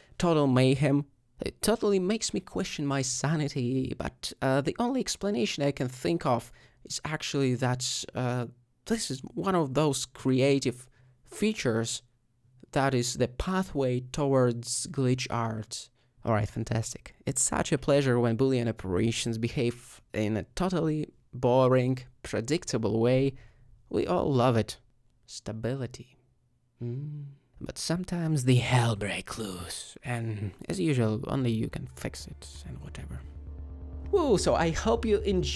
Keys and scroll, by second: 1.9 s, 11.6 ctrl+z, 12.8 ctrl+z, 16.1 g, 17.7 z, 22.5 g, 22.6 y, 28.8 alt+shift+g, 30.9 r, 32.2 s.